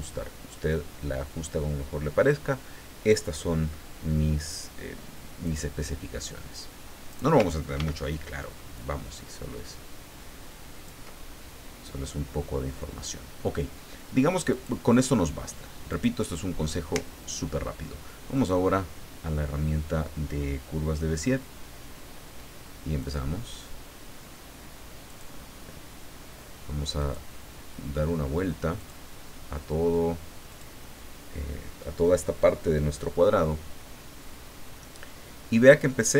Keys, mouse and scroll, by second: 5.4 click, 6.5 click, 7.8 ctrl+d, 8.7-11.1 ctrl+drag, 14.5 click, 15.9 click, 18.4 click, 23.0 click, 25.1 click, 27.0 click, 28.8 click, 30.5 click.